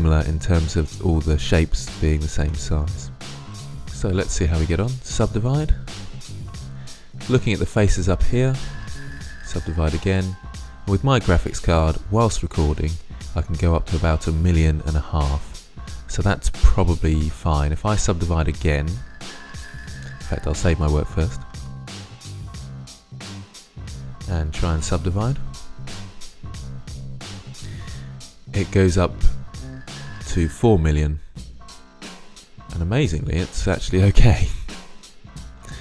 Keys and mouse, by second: 3.3 Tab, 5.0 click, 6.7-7.7 drag, 9.2 click, 12.9 click, 23.6 click, 24.5-26.7 drag, 30.8-32.6 middle drag, 33.3-35.2 middle drag, 35.5-35.8 middle drag.